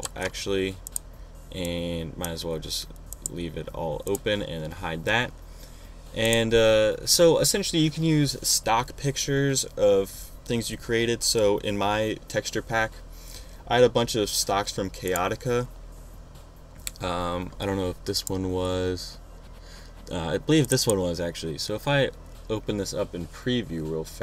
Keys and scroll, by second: 0.0 shift+super+g.